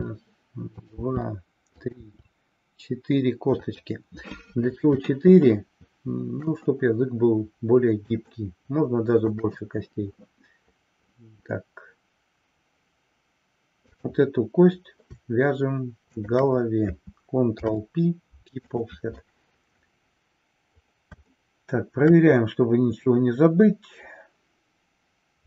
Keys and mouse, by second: 0.8 drag, 1.1 e, 3.7 click, 5.2-6.5 shift+middle drag, 8.3-9.5 shift+middle drag, 16.1 shift+click, 17.5 ctrl+p, 21.5-22.2 shift+middle drag.